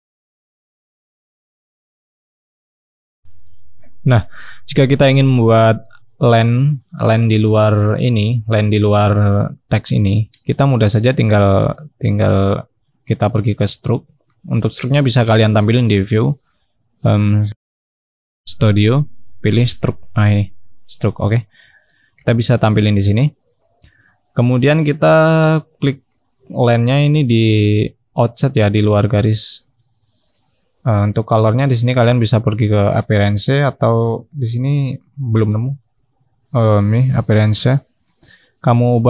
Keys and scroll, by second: 9.6-11.7 scroll up 1.